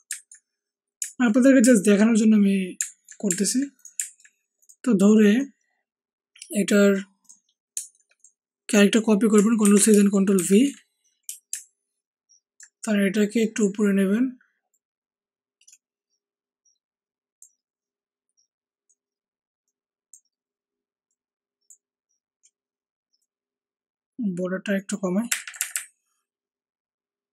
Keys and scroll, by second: 9.6 ctrl+c, 10.3 ctrl+shift+v, 25.3 Up, 25.4 Up, 25.5 Up, 25.7 Up.